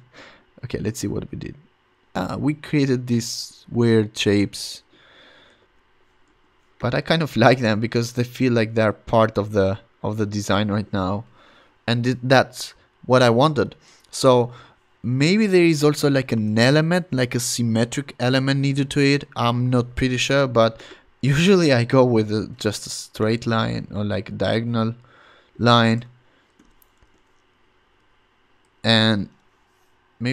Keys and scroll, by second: 5.6 super+z, 6.3 v, 15.7 shift+super+n, 16.3 Return, 26.5 shift+super+h, 27.0 v, 27.5 shift+Left, 27.8 shift+Up, 28.6 shift+Right.